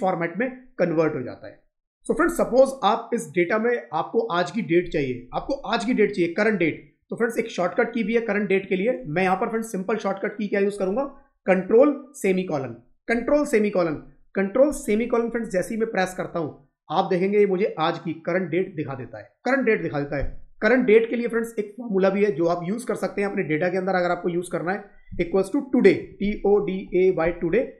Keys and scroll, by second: 14.6 ctrl+;.